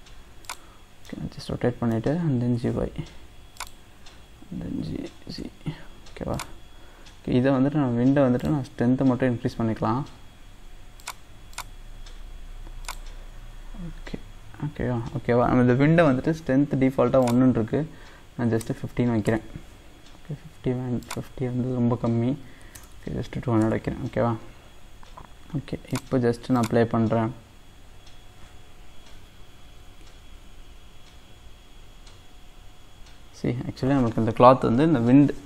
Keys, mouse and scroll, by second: 1.1-2.6 middle drag, 2.6 g, 4.8 g, 8.4-13.9 drag, 13.9 scroll up 2, 17.2-22.9 drag, 22.9 KP_0, 25.9-35.4 drag.